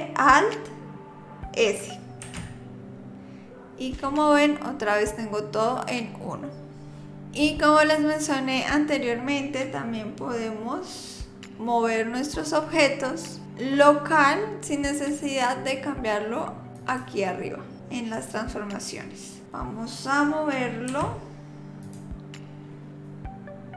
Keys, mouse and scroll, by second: 2.2 alt+s, 16.8 click, 20.9 r, 22.7 g.